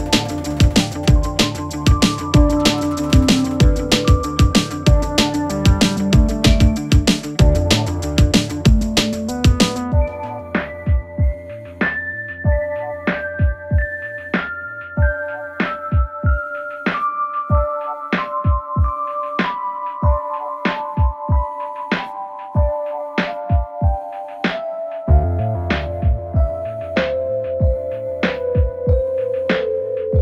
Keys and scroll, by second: 12.7 space, 24.6 space.